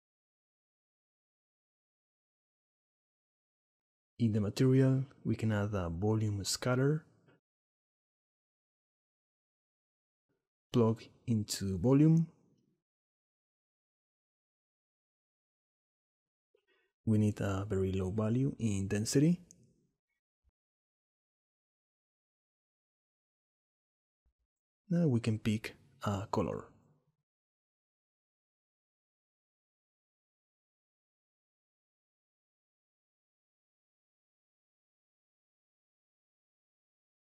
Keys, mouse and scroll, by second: 0.2 s, 0.4-2.1 drag, 3.1 click, 4.6 click, 6.1 x, 6.6 shift+a, 10.8-12.0 drag, 13.2 click, 14.2-16.0 drag, 17.3-22.4 drag, 24.6 click, 29.1 scroll up 1, 29.8-30.2 scroll up 1, 30.2 middle click, 31.2 click, 33.4-36.3 drag.